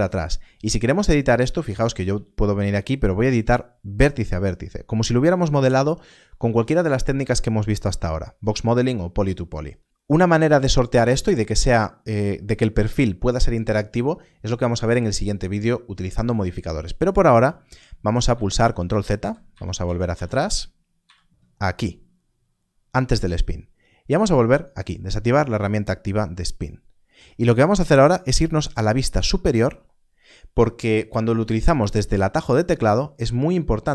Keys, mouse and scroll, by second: 1.2 Tab, 1.2 click, 2.0 g, 3.4 right click, 17.6 right click, 17.9 ctrl+z, 18.2 ctrl+z, 18.5 ctrl+z, 18.8 ctrl+z, 19.0 ctrl+z, 19.4 ctrl+z, 19.7 ctrl+z, 20.0 ctrl+z, 20.9-21.3 ctrl+z, 24.3 click, 26.3 scroll up 1, 29.1 KP_7.